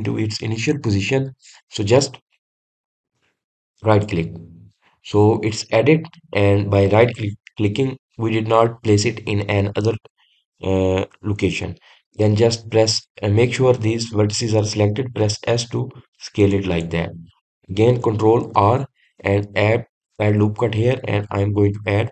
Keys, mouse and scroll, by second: 18.1 click, 20.0 ctrl+r.